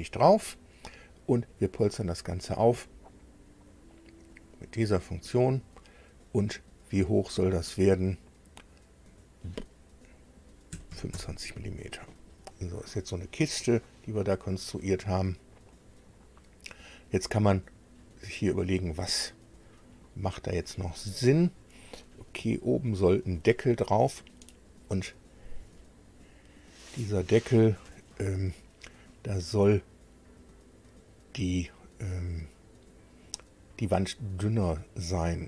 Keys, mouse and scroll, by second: 0.3 click, 4.3 click, 10.7 KP_2, 10.9 KP_5, 11.1 KP_Enter, 12.7 scroll down 2, 13.3-15.8 middle drag, 18.6-19.1 scroll up 2, 20.0 middle click, 20.9 middle click, 22.5 shift+middle click, 26.1-26.4 scroll up 2.